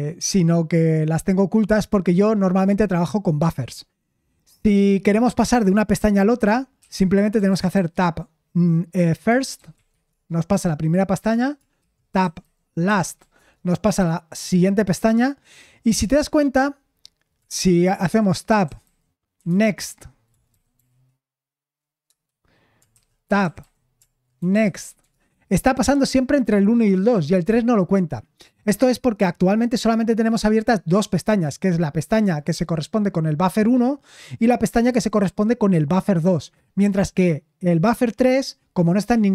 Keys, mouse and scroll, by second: 6.8-8.2 typing, 9.9 typing, 10.0 Return, 11.7-13.6 typing, 17.9-20.7 typing, 22.8-25.7 typing.